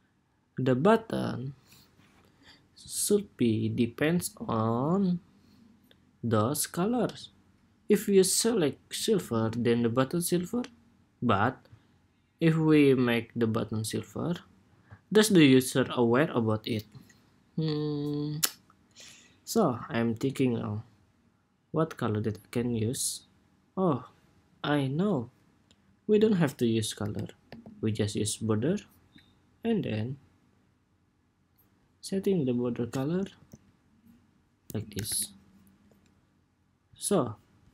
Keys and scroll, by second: 33.1 ctrl+c.